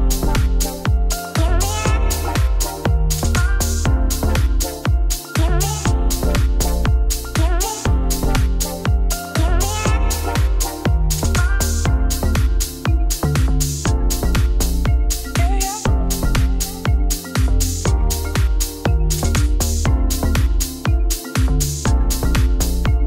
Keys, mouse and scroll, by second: 1.1 middle click, 1.4 2, 1.7 alt+click, 2.4 u, 2.5 shift+middle click, 3.2 alt+click, 3.7 u, 3.9 shift+middle click, 4.4-5.0 scroll down 2, 5.0 alt+click, 5.4 u, 5.9 alt+click, 6.4 u, 10.9 middle click, 11.1 Tab, 12.2 KP_Divide, 12.6-18.1 middle drag, 18.1 click, 18.8 shift+middle click, 19.0 scroll up 5, 19.4 shift+middle click, 19.7 click, 19.8 middle click, 20.1 a, 20.6 middle click, 20.9 3, 21.1 click, 21.4 click, 22.3 u, 22.4 middle click.